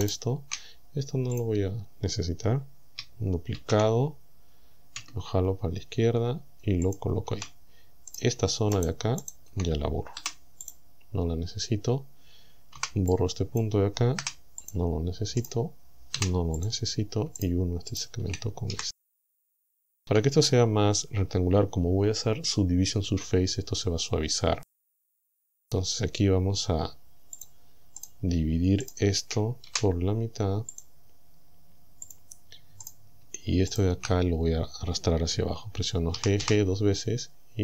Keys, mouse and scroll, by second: 0.1 shift+right click, 1.4 click, 3.6 shift+d, 6.9 ctrl+click, 8.2 right click, 8.8 shift+right click, 9.2 shift+right click, 10.2 Delete, 10.7 click, 12.8 b, 13.2 click, 14.2 Delete, 14.7 click, 15.4 right click, 16.2 Delete, 16.6 click, 17.4 shift+right click, 18.0 shift+right click, 18.8 f, 19.5 shift+middle click, 25.0-25.4 scroll up 2, 27.4 click, 28.0 right click, 28.9 shift+right click, 29.7 w, 30.8 click, 32.1 click, 32.9 right click, 33.8 shift+right click, 34.3-34.7 scroll down 2, 36.2 g.